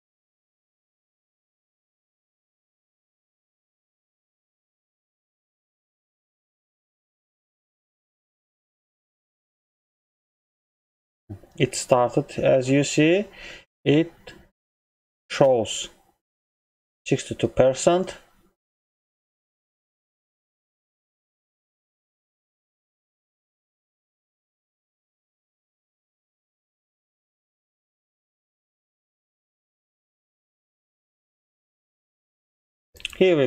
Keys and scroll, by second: 19.8 ctrl+m.